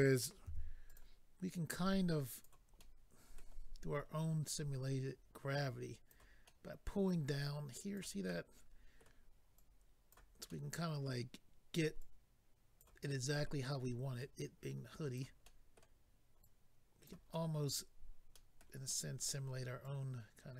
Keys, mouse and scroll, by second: 0.4 f, 0.9 click, 0.9 click, 1.7 click, 2.8 middle click, 3.9-4.5 scroll up 1, 4.5 click, 6.4 middle click, 7.4 click, 8.2 middle click, 9.5 click, 10.5 middle click, 12.0 click, 13.1 middle click, 14.2 click, 15.4 middle click, 16.4 click, 17.3 middle click, 18.3 middle click, 18.8 middle click, 19.8 click.